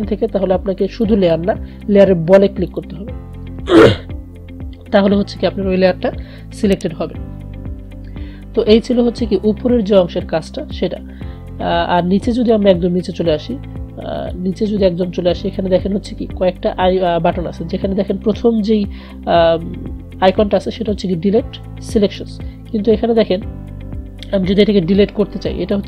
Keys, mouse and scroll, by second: 1.2 click, 14.4 click.